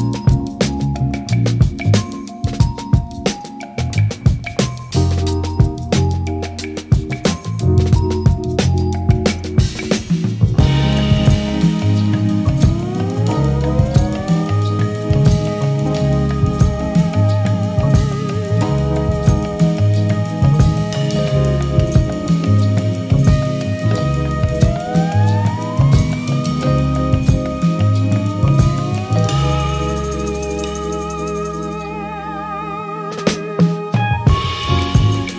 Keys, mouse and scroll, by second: 0.0 click, 0.2 middle click, 0.4 click, 0.4 middle click, 0.5 click, 0.6 click, 0.7 middle click, 0.8 click, 0.9 f, 0.9 shift+click, 1.2 middle click, 1.3 middle click, 1.3 shift+click, 1.5 click, 1.5 ctrl+z, 1.7 click, 2.0 middle click, 2.0 ctrl+z, 2.1 click, 2.4 click, 2.5 shift+click, 2.7 middle click, 2.8 shift+click, 3.3 middle click, 3.4 shift+click, 3.5 ctrl+click, 3.5 middle click, 3.6 ctrl+click, 3.8 click, 3.9 middle click, 3.9 click, 4.1 ctrl+middle click, 4.2 click, 4.3 ctrl+alt+Page_Down, 4.3 middle click, 4.5 shift+click, 4.6 click, 4.8 middle click, 4.8 click, 4.8 middle click, 4.9 click, 5.0 shift+click, 5.1 middle click, 5.2 shift+click, 5.3 click, 5.8 ctrl+z, 5.9 click, 6.0 middle click, 6.1 click, 6.3 middle click, 6.6 ctrl+alt+Page_Down, 7.3 click, 7.4 click, 7.5 middle click, 7.6 click, 7.9 ctrl+middle click, 8.0 click, 8.2 click, 8.4 middle click, 8.5 shift+click, 8.6 middle click, 8.9 middle click, 9.1 click, 9.1 middle click, 9.4 shift+click, 9.5 shift+click, 9.6 middle click, 9.7 shift+click, 9.8 shift+click, 10.0 middle click, 10.3 click, 10.4 ctrl+z, 10.5 click, 10.7 click, 10.7 middle click, 10.9 middle click, 11.0 shift+middle click, 11.4 middle click, 11.5 click, 11.5 ctrl+z, 11.6 click, 11.8 x, 12.1 middle click, 12.2 middle click, 12.6 click, 12.8 f, 12.9 click, 13.0 middle click, 13.2 click, 13.3 middle click, 13.5 click, 13.7 click, 14.0 middle click, 14.0 click, 14.2 middle click, 14.4 click, 14.6 ctrl+z, 14.7 middle click, 14.8 click, 15.1 click, 15.2 middle click, 15.4 click, 15.4 middle click, 15.5 ctrl+z, 15.6 click, 15.8 click, 15.8 middle click, 15.9 click, 15.9 middle click, 16.0 click, 16.2 click, 16.3 middle click, 16.4 shift+click, 16.8 middle click, 16.9 click, 17.0 middle click, 17.1 middle click, 17.2 click, 17.3 click, 17.9 ctrl+middle click, 18.1 click, 18.3 f, 18.4 ctrl+click, 18.6 middle click, 18.7 click, 18.9 ctrl+middle click, 19.0 shift+click, 19.0 click, 19.1 middle click, 19.1 click, 19.4 shift+middle click, 19.9 click, 20.0 middle click, 20.1 ctrl+z, 20.2 ctrl+shift+click, 20.4 click, 20.5 click, 20.8 click, 20.8 middle click, 21.0 click, 21.0 middle click, 21.1 ctrl+click, 21.3 click, 21.4 shift+click, 21.6 middle click, 21.7 shift+click, 21.8 middle click, 21.9 click, 21.9 middle click, 22.0 click, 22.2 click, 22.3 click, 22.6 shift+click, 22.7 f, 22.8 click, 22.9 click, 23.0 middle click, 23.0 click, 23.4 click, 23.5 middle click, 23.6 click, 23.9 middle click, 24.1 click, 24.2 middle click, 24.3 click, 24.4 click, 24.9 middle click, 24.9 click, 25.1 middle click, 25.2 click, 25.4 shift+click, 25.4 ctrl+middle click, 25.8 middle click, 25.9 click, 26.1 click, 26.4 click, 26.6 middle click, 27.0 shift+click, 27.1 click, 27.4 ctrl+middle click, 27.5 shift+click, 27.6 middle click, 28.2 shift+click, 28.2 ctrl+click, 28.3 shift+click, 28.4 ctrl+click, 28.4 f, 29.0 click, 29.0 middle click, 29.1 click, 29.2 middle click, 29.3 ctrl+middle click, 29.4 ctrl+click, 29.6 click, 29.8 middle click, 29.8 click, 30.1 click, 30.3 click, 30.4 ctrl+middle click, 30.5 click, 30.7 middle click, 30.9 middle click, 31.0 click, 31.1 click, 31.2 middle click, 31.4 click, 31.5 shift+click, 31.6 shift+click, 32.2 ctrl+middle click, 32.2 shift+click, 32.3 ctrl+middle click, 32.9 middle click, 33.0 shift+click, 33.2 middle click, 33.3 ctrl+z, 33.3 click, 33.4 ctrl+z, 33.5 middle click, 33.6 click, 33.8 click, 34.6 click, 34.7 click, 34.8 middle click, 35.0 click, 35.1 middle click, 35.2 middle click, 35.3 click, 35.3 middle click.